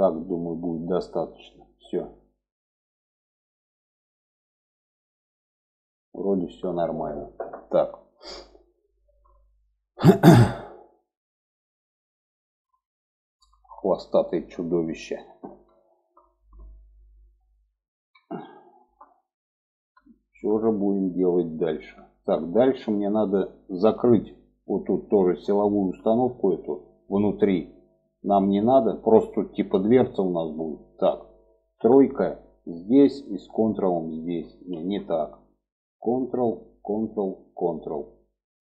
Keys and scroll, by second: 31.1 3, 34.0 ctrl+z.